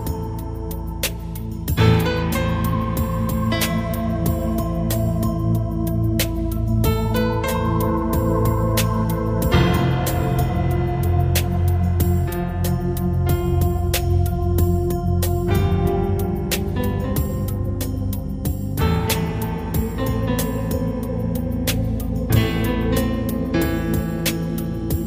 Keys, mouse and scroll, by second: 5.2 click, 7.9 click, 19.4 right click, 21.2 right click, 22.4 click.